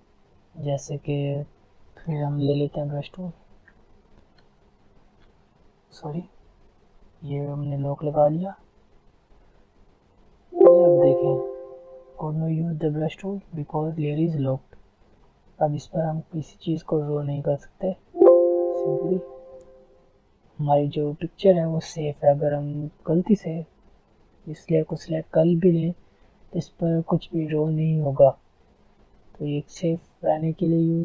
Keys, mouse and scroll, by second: 2.8 alt+right click, 3.6 alt+scroll up 1, 3.6 typing, 4.6 click, 5.2 ctrl+z, 7.5 click, 10.4 click, 14.7 click, 14.7 click, 15.1 alt+scroll down 1, 15.5 alt+scroll up 1, 16.2 alt+scroll down 1, 16.7-17.1 alt+scroll up 1, 17.6 alt+click, 19.3 alt+scroll down 1, 19.7 alt+scroll up 1, 20.5 alt+scroll down 1, 21.1 alt+scroll up 1, 21.7 alt+scroll down 1, 22.3 alt+scroll up 1, 23.5 alt+scroll down 1, 26.8 alt+scroll down 1, 26.9 alt+scroll up 1, 28.2 alt+scroll down 1, 28.8 alt+scroll up 1, 29.0 alt+scroll down 1, 29.3 alt+scroll up 1, 29.5 alt+scroll down 1, 29.9 alt+scroll up 1, 30.1 alt+scroll down 1, 30.8 alt+scroll up 1.